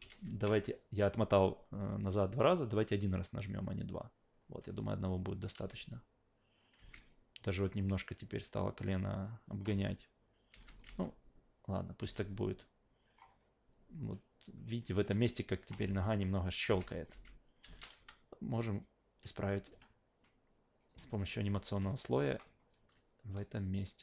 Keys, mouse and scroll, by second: 3.1 click, 5.3 click, 5.6 alt+v, 6.8 alt+v, 7.1-9.6 drag, 10.5 alt+v, 10.7 click, 10.9 alt+v, 12.0 alt+v, 12.3 click, 15.6 click, 15.7 alt+v, 16.7 alt+v, 16.9 click, 17.1 alt+v, 17.6 alt+v, 17.9 q, 18.7 click, 19.7 a, 20.9 click, 21.2 a, 22.0 alt+middle click, 22.4 alt+middle click, 23.3-24.0 drag.